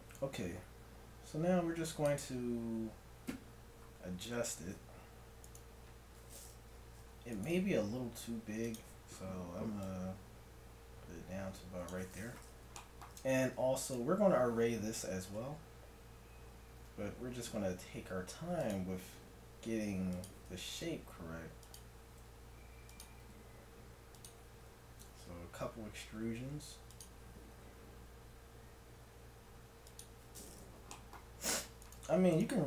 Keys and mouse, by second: 0.2 r, 8.1 r, 8.9 right click, 9.9-11.6 drag, 12.8-13.9 middle drag, 16.9 e, 19.1 r, 20.6 g, 22.2 r, 23.3 g, 25.0 e, 27.5 r, 31.8-32.6 right drag.